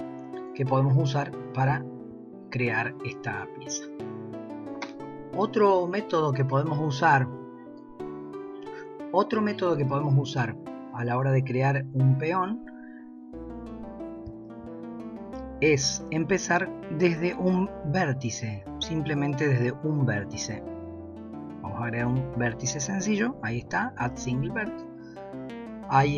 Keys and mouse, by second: 0.8-1.2 middle drag, 1.7 shift+middle drag, 4.2 KP_1, 7.5 click, 10.4-11.0 shift+middle drag, 14.4 shift+a.